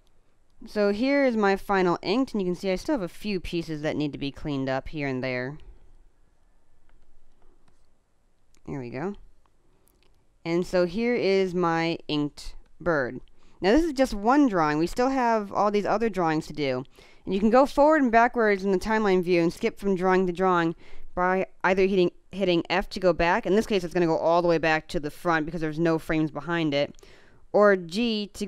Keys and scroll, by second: 2.8 space, 6.9 space, 9.1 space, 12.5 space.